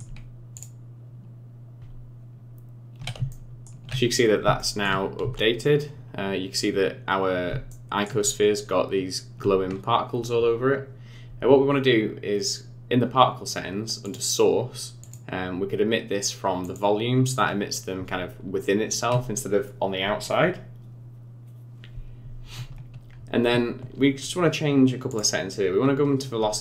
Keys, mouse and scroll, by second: 0.6 click, 3.3 shift+middle click, 4.1-4.4 scroll up 5, 4.6 shift+middle click, 5.2 z, 6.7-7.2 scroll down 2, 7.7 shift+middle click, 14.0 click, 15.0 click, 21.0-22.7 scroll down 5, 22.7-25.1 scroll down 4, 25.1 click, 25.6-26.3 scroll down 3.